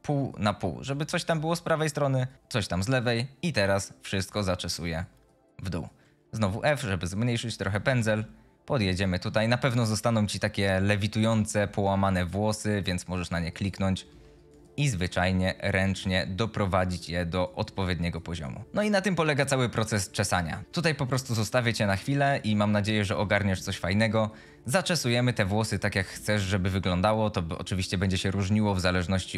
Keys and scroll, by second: 6.6 f, 14.1 f.